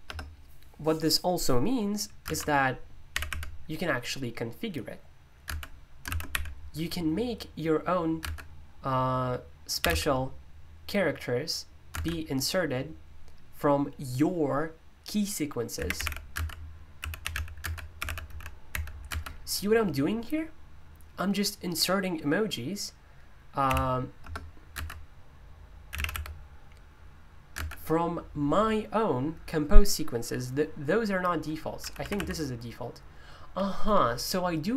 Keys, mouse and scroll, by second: 0.0 BackSpace, 3.1 typing, 6.1-6.8 typing, 8.2 typing, 9.8 typing, 11.9 typing, 15.7-18.7 typing, 23.6 d, 25.6-28.0 typing, 31.8 p.